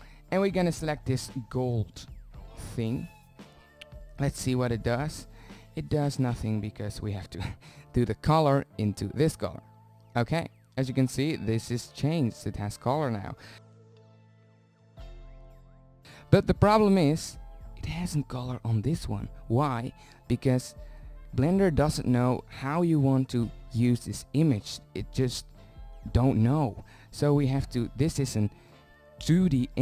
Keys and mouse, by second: 1.8 shift+z, 2.6 click, 3.4 z, 4.9 click, 10.4 shift+z, 12.4-13.3 middle drag, 19.7-21.4 drag, 25.3 z, 25.8 z, 27.9 click.